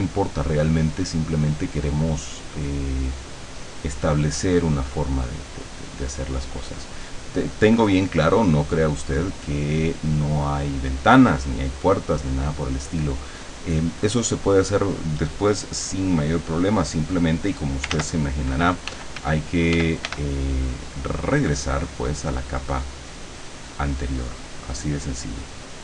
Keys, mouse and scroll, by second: 5.6-6.6 drag, 6.8-9.2 drag, 16.3-17.8 drag, 18.0 ctrl+z, 18.9 f, 20.7-22.2 drag, 22.7-25.5 drag.